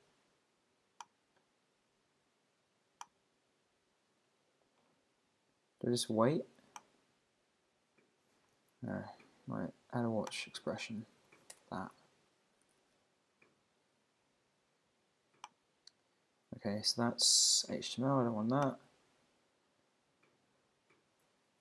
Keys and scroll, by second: 8.5 super+c, 11.2 super+v, 11.5 Return.